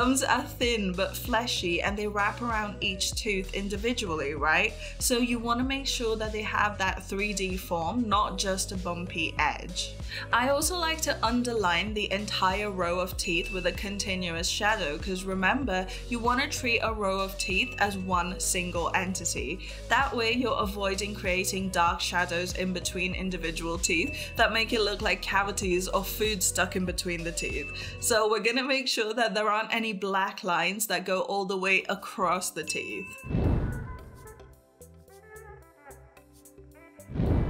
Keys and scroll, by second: 1.6 ctrl+z, 28.1 [.